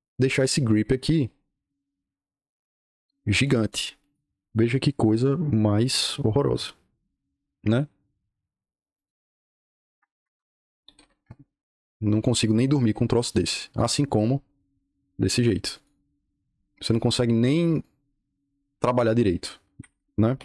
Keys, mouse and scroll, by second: 1.1-1.6 drag, 2.5 click, 3.3 click, 3.6 click, 3.9 click, 6.9 click, 8.9 click, 10.0 Escape, 10.2 Escape, 10.7 o, 11.1 Return, 13.2-13.7 drag, 14.4 click, 15.2 click, 15.6 click, 17.7 click, 19.6 Escape, 20.0-20.4 typing.